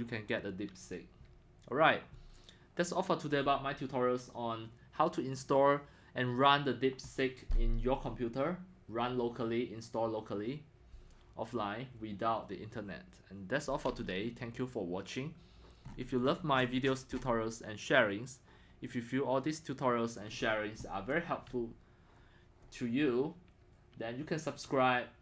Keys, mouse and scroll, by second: 15.9-16.2 scroll up 6, 16.2-18.9 middle drag, 16.2-17.3 scroll down 36, 17.3 scroll, 18.9-20.2 scroll down 12, 19.1 middle click, 19.2 middle drag, 20.2-25.2 drag.